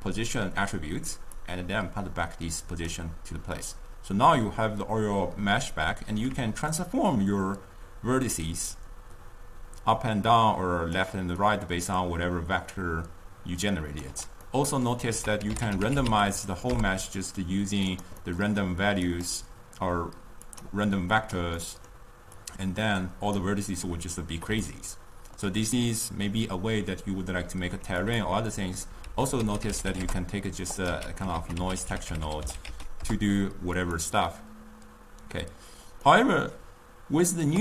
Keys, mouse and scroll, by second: 6.9-10.0 shift+drag, 11.5-14.6 shift+drag, 14.6 middle click, 15.3 ctrl+a, 18.5-19.3 middle drag, 19.3-21.9 drag, 21.9-22.5 middle drag, 22.5-24.7 drag, 24.7-27.8 shift+middle drag, 28.1 click, 29.2 ctrl+a, 31.0 x, 31.5 ctrl+a, 36.1-36.9 middle drag, 36.9-37.3 scroll up 1.